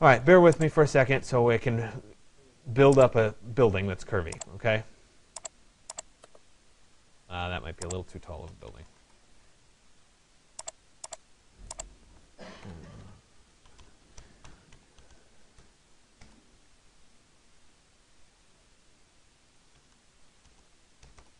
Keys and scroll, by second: 8.5 Return, 13.0 BackSpace, 20.8 Return.